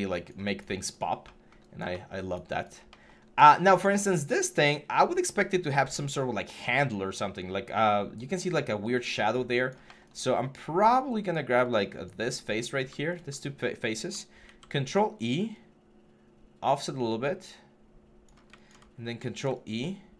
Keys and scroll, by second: 3.0 1, 3.9 3, 14.2 ctrl+e, 18.8 ctrl+e.